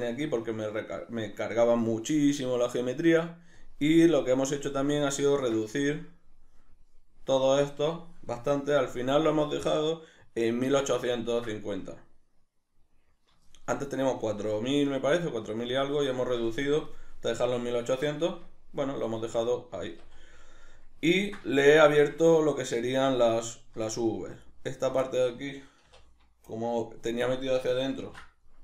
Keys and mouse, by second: 3.5 drag, 4.5-24.4 middle drag, 8.9 a, 18.3 Tab, 19.9 Tab, 24.4 alt+right click, 25.1-28.6 shift+middle drag, 25.8 2, 28.0 ctrl+e.